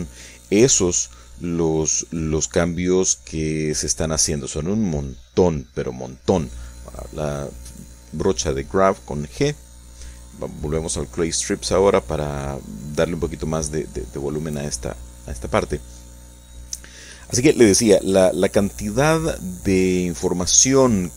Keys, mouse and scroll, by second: 0.2-2.0 middle drag, 2.4-5.6 shift+drag, 5.7 shift+middle click, 6.4 shift+middle click, 7.2 shift+middle click, 8.2 middle click, 10.2 shift+3, 11.2 f, 11.8-20.4 drag, 20.5 click.